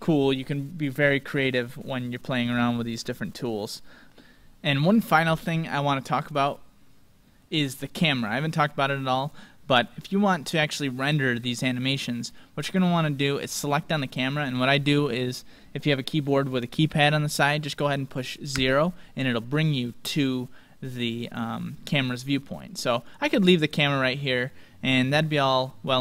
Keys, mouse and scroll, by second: 0.6-2.7 middle drag, 5.7-7.5 middle drag, 9.1-11.0 right drag, 9.8-12.8 middle drag, 12.8-13.6 scroll down 1, 13.6 scroll down 1, 18.5 KP_0, 23.0-25.4 drag.